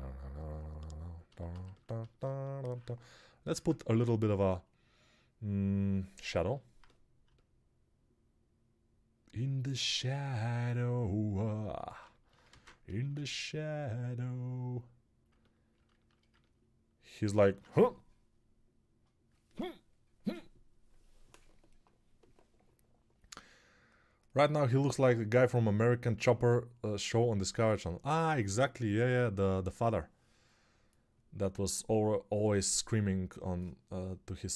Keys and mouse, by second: 12.5 ctrl+space, 12.5-34.5 ctrl+right drag.